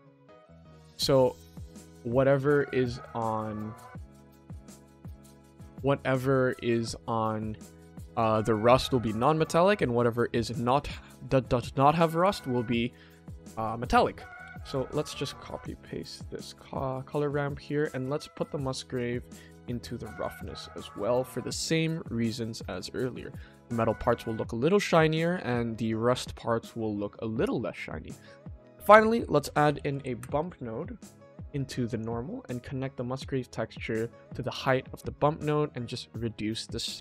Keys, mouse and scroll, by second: 0.7-1.9 shift+middle drag, 2.4-2.9 drag, 3.3 click, 4.6 click, 7.4-8.1 ctrl+middle drag, 14.6 click, 15.1 shift+d, 16.8 shift+middle click, 18.6-20.2 drag, 22.0-22.6 ctrl+middle drag, 23.2-24.0 ctrl+middle drag, 25.5-25.9 shift+middle drag, 31.5-32.1 drag, 33.1-34.5 drag, 36.0-37.0 drag.